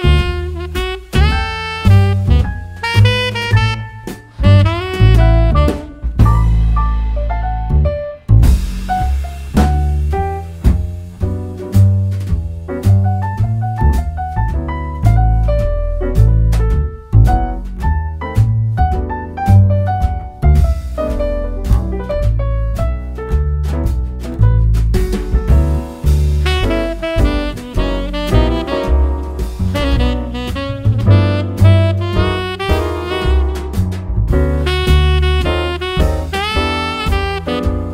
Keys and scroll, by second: 1.1 super+c, 1.4 super+v, 8.4 super+v.